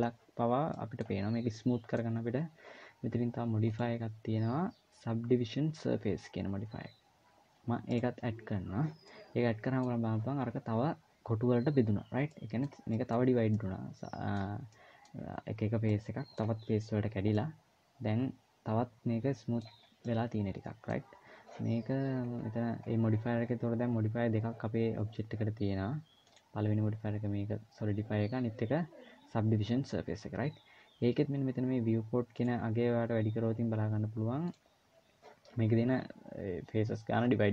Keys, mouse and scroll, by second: 3.5 click, 8.8 middle click, 12.1 middle click, 12.6 middle click, 13.1 scroll down 2, 13.3 middle click, 14.6 middle click, 15.0-15.6 scroll up 2, 15.6 middle click, 15.6 scroll up 1, 17.0 middle click, 19.5 scroll down 2, 19.8 middle click, 21.8-22.5 scroll down 3, 22.5-24.7 scroll up 4, 26.0 click, 32.2 click, 34.2 click.